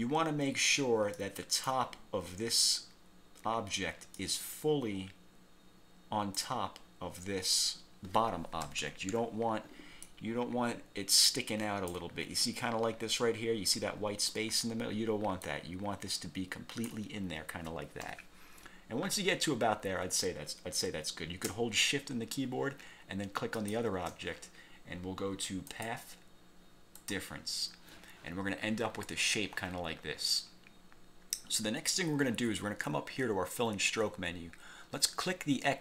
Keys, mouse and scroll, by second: 1.3 ctrl+click, 4.3-6.7 ctrl+drag, 8.7 =, 10.1-12.2 ctrl+drag, 15.6-17.2 ctrl+drag, 18.2 1, 18.8 scroll up 2, 19.3 scroll down 2, 23.7 shift+click, 25.9 click, 27.1 click, 30.9-31.3 scroll up 2.